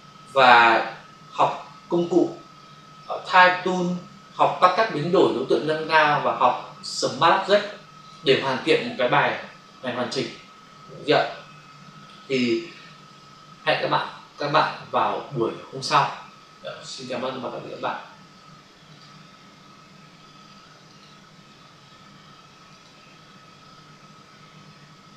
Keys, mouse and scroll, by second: 17.7 click, 18.9 click, 19.0 click, 20.8 click, 21.0 click, 22.7 click, 22.9 click.